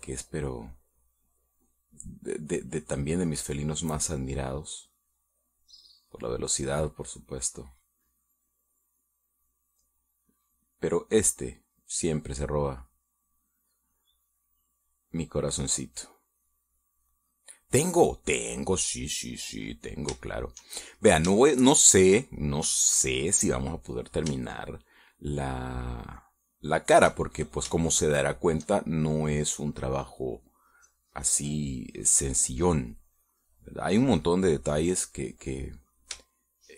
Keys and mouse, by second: 0.0 click, 1.4-2.5 drag, 3.4 click, 4.0 click, 4.9-6.0 drag, 6.2 click, 7.0 click, 7.8 click, 8.7 middle click, 10.9 click, 11.8 click, 12.7 middle click, 13.8-14.8 drag, 15.0 click, 16.0-17.1 drag, 17.4 click, 19.4 click, 20.0 click, 20.5-22.3 middle drag, 23.3 shift+middle click, 25.4 shift+middle click, 26.2 shift+middle click, 26.9-27.9 shift+middle drag, 29.1 shift+middle click, 31.2-36.7 drag.